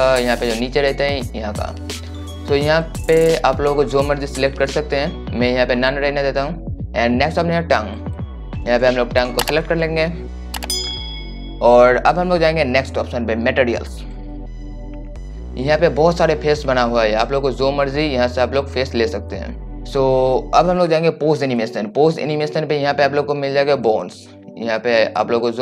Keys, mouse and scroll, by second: 0.5-1.1 scroll down 1, 1.1-2.4 right drag, 13.7-25.6 drag.